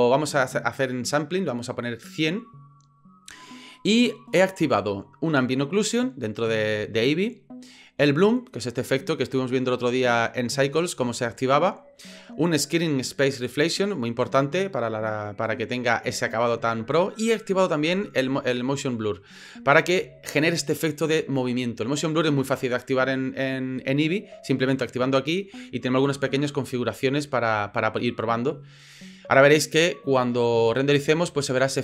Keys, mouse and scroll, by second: 8.3 click, 8.9 click, 9.3 click, 10.6 click, 14.1 click, 14.6 click, 15.0 click, 15.5 click, 24.8 click, 25.2 click, 25.7 click, 27.2 click, 31.3 click.